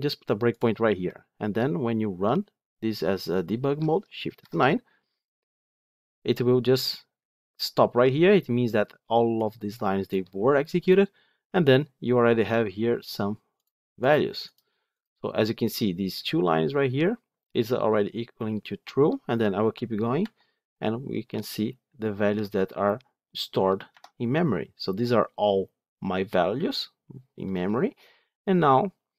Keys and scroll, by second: 0.5 ctrl+F8, 4.3 shift+F9, 20.1 F8.